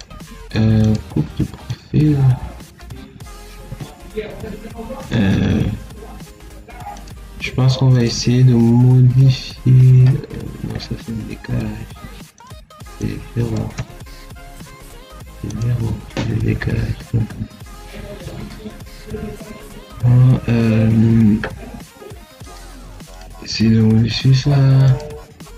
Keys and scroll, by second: 3.5 1, 4.9 BackSpace, 6.1 2, 13.6 0.